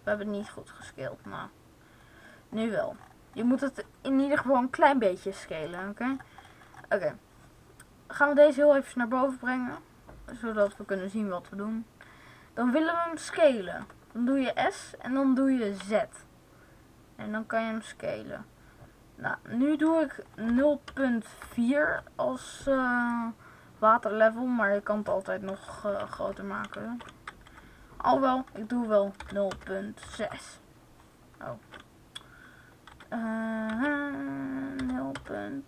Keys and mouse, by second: 3.6 middle click, 6.0-7.6 right drag, 8.1 click, 8.6 right click, 9.3 click, 10.3-12.1 drag, 13.6 s, 23.0-24.7 drag, 25.8 ctrl+z, 26.7 ctrl+z, 27.4 s, 31.6 ctrl+z, 32.8 s.